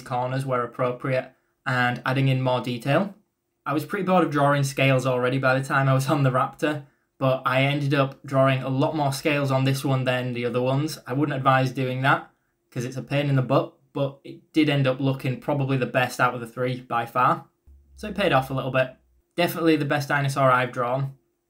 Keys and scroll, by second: 11.7 ctrl+z, 16.6 e.